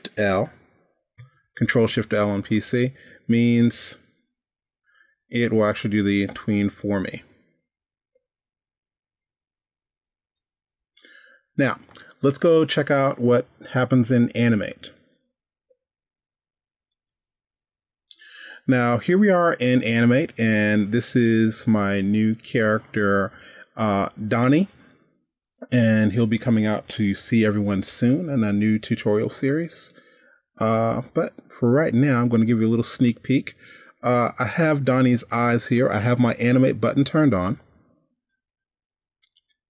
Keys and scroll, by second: 1.6 shift+super+l.